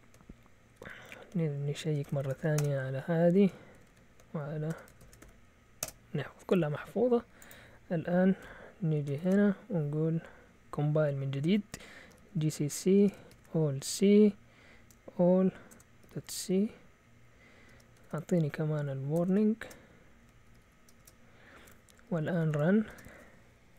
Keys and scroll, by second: 0.7 ctrl+w, 0.8 ctrl+w, 1.9 Escape, 2.0-6.0 typing, 4.7 Escape, 5.8 Return, 8.4 q, 9.1 ctrl+l, 10.6 Up, 11.4 Down, 11.9-13.7 typing, 15.7-16.5 typing, 17.6-22.9 typing.